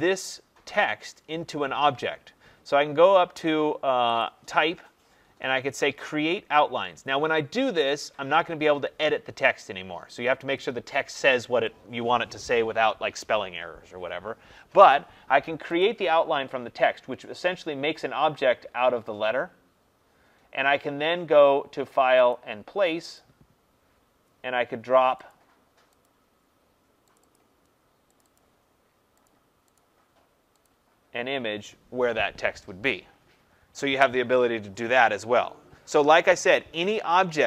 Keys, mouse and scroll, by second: 4.1 click, 15.7 click, 22.3 click, 23.1 click, 25.2 click, 25.9 click, 27.1 click, 27.3 click, 28.2 click, 28.4 click, 29.2 click, 29.7 click, 30.8 click.